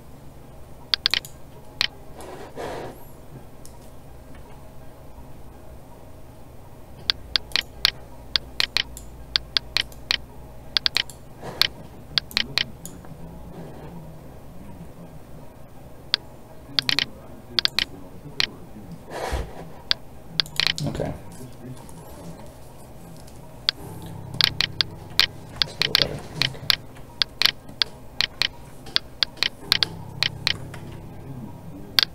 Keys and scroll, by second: 17.8 space, 26.7 alt+a, 30.8 ctrl+z.